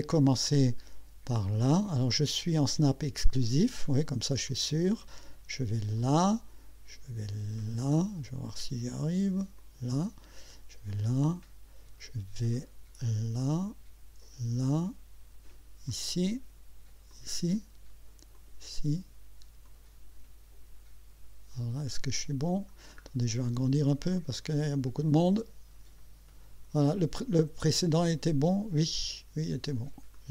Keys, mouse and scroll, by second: 4.5 click, 6.0 click, 7.8 click, 9.6 click, 10.9 click, 13.4 click, 14.6 click, 15.9 click, 17.1 click, 18.3 click, 19.7 click, 23.0-23.7 scroll up 2, 30.1 click.